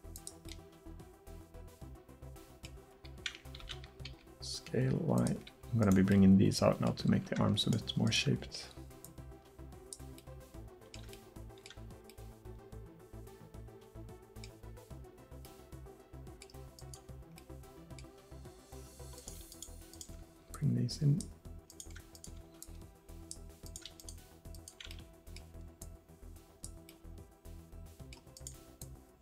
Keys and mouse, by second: 2.0-3.7 middle drag, 3.7 s, 9.1-10.1 right drag, 10.1 click, 10.4 middle click, 19.2-20.6 drag, 20.6-22.0 middle drag, 24.5-25.8 drag, 25.8 middle click, 26.5 click.